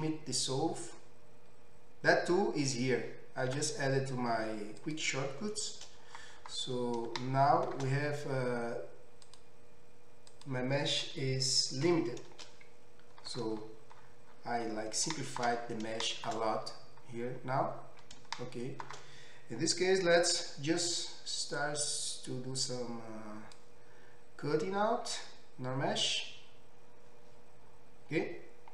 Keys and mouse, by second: 3.5 q, 6.2 middle click, 7.1-9.3 shift+drag, 15.0-18.8 shift+middle drag, 20.3 k.